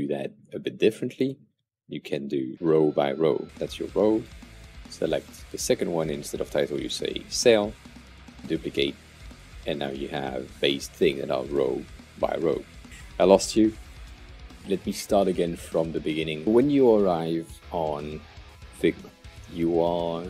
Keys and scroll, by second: 2.4 Delete, 3.4 super+d, 7.8 super+d, 17.9 alt+super+=.